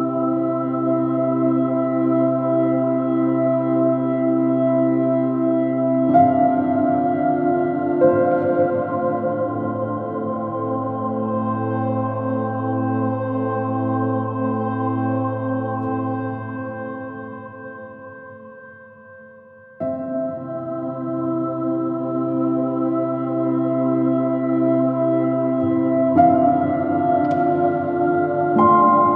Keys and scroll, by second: 3.1 r, 9.2 super+i, 10.4 super+z, 19.1 super+z, 28.2 super+z.